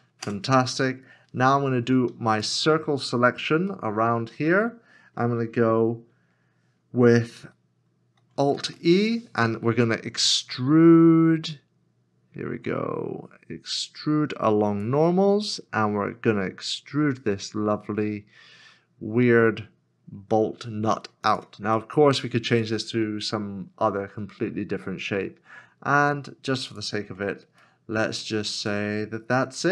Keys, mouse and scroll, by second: 0.2 Return, 2.7 alt+click, 3.9 middle click, 6.2-8.1 scroll down 1, 8.5 alt+e, 21.8 middle click, 27.6 middle click.